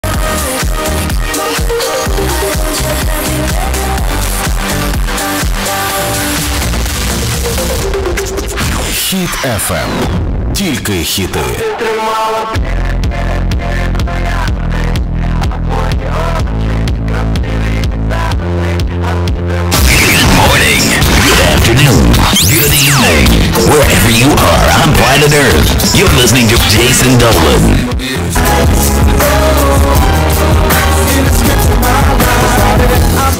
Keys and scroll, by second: 0.1 ctrl+q, 2.3 s, 3.7 Down, 3.9 Down, 4.0 Down, 4.9 Down, 5.1 Return.